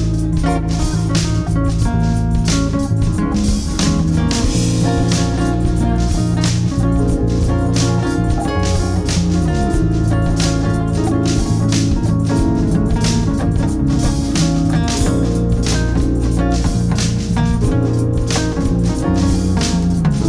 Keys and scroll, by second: 4.2 shift+F2, 6.8-7.7 typing, 8.1 Escape, 9.3 alt+w, 9.6 p, 14.7 ctrl+z, 15.3 Escape.